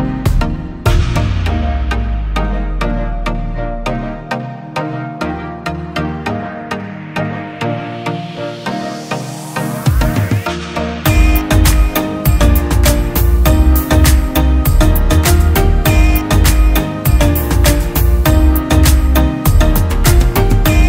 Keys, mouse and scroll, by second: 13.9 ctrl+t, 14.6 alt+shift+click, 17.7 ctrl+click, 18.8 ctrl+click.